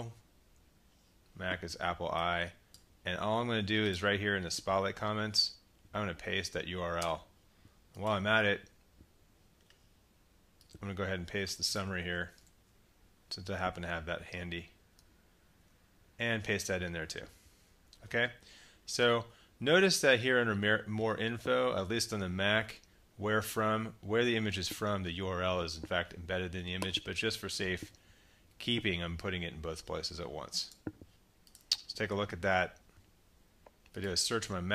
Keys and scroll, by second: 5.4 super+v, 12.0 super+c, 12.4 super+Tab, 15.5 super+v, 17.5 Tab.